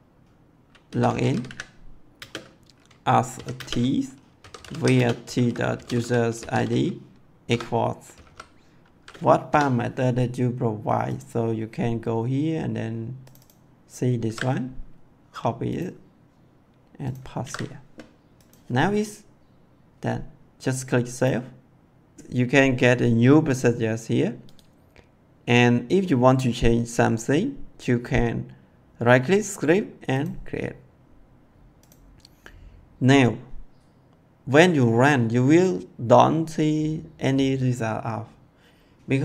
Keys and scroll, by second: 0.5-2.1 typing, 3.5-8.1 typing, 9.4 BackSpace, 14.2 ctrl+c, 17.3 ctrl+v.